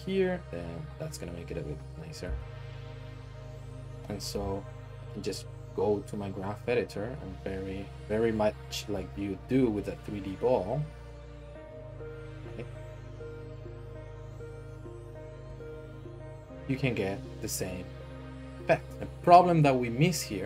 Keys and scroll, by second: 0.4 g, 4.2 Home, 8.9 r, 13.3 r, 14.3 r, 15.6 alt+shift+z.